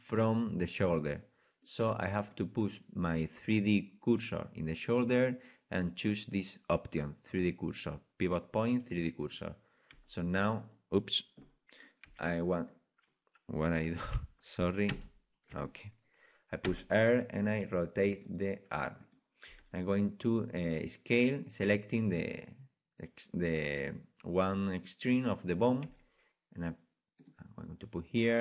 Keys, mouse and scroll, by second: 9.3 click, 9.9 e, 12.0 right click, 12.0 r, 12.6-14.9 right drag, 14.9 ctrl+z, 16.6 r, 19.0 click, 19.0-20.7 right drag, 19.5 g, 25.8 g.